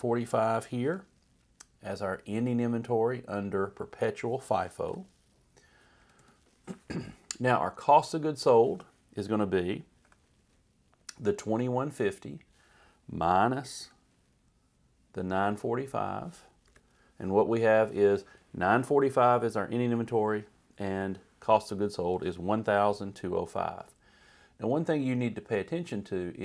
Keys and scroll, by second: 0.9 =, 5.1 Return, 6.0 Up, 6.2 Right, 10.1 =, 16.7 Return.